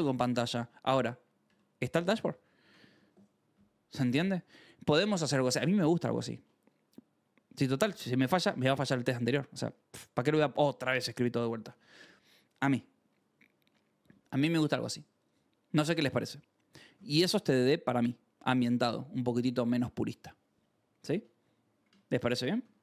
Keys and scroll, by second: 1.5 ctrl+shift+v, 2.2 Escape, 2.6 ctrl+s, 22.5 g.